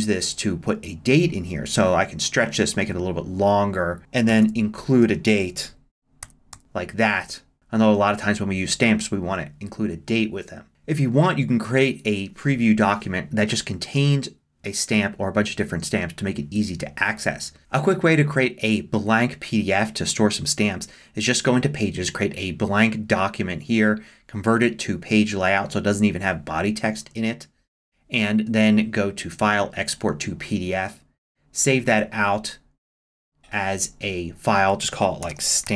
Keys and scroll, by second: 4.3 Right, 6.0-7.4 typing, 35.0-35.7 typing.